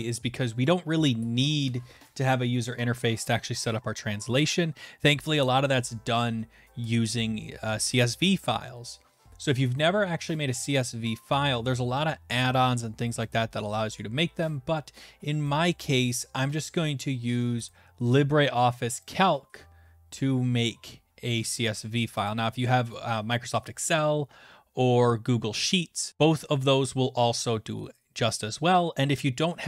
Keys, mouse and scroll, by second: 17.7 right click, 19.0 click, 22.3 click.